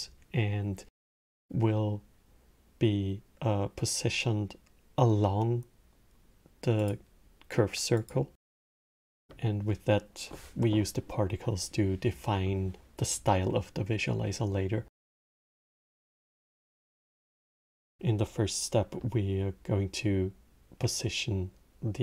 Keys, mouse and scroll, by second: 6.5 click, 7.6 click, 13.2-15.6 middle drag, 15.6 click, 15.8-19.0 drag.